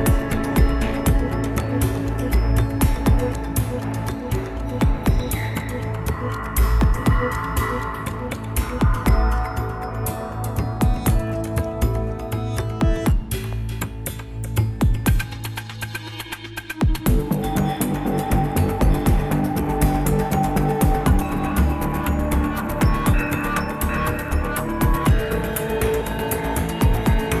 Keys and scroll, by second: 17.7-18.6 Up, 18.8-19.2 Up, 19.8 ctrl+Up.